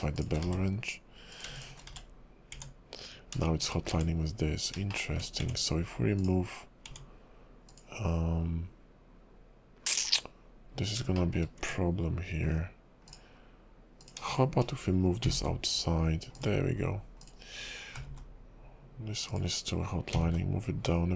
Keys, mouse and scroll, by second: 0.2 shift+click, 0.7 1, 1.3 click, 1.5 shift+click, 2.2 1, 2.5 Tab, 3.4 shift+middle click, 3.8 scroll up 3, 3.9 Tab, 4.9 shift+middle click, 5.4 Tab, 6.2 click, 6.9 Tab, 7.7 click, 10.1 scroll down 2, 10.7 scroll up 2, 11.2 shift+middle click, 11.6 Tab, 12.4 scroll down 3, 13.1 click, 14.0 click, 14.3 shift+click, 14.3 shift+click, 15.2 g, 17.2 click, 18.1 g, 20.1 g.